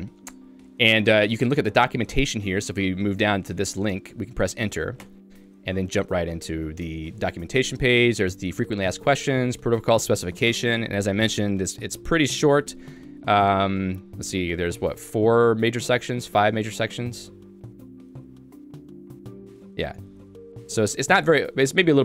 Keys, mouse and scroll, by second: 2.3 l, 5.1 Return, 7.1 j, 8.1 l, 9.1 j, 10.5 Return, 12.5 ctrl+d, 12.9-14.2 ctrl+d, 18.9 shift+g, 20.2 ctrl+u.